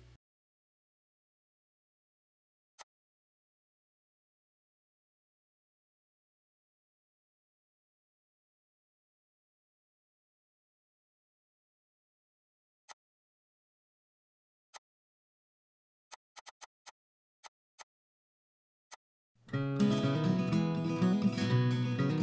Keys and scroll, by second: 8.0 Delete, 11.6 h, 13.7 ctrl+h, 15.3 ctrl+h.